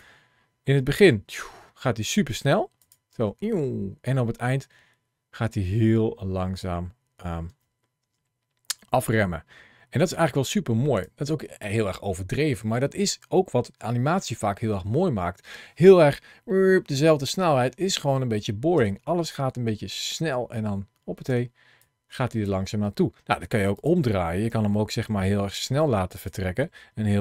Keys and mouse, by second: 0.8 space, 2.1 space, 2.6 click, 7.3 space, 7.8 space, 9.9 space, 10.3 click, 18.6 space, 21.1 space, 21.6 click, 23.6 click, 24.3 g, 25.4 click, 26.0 click.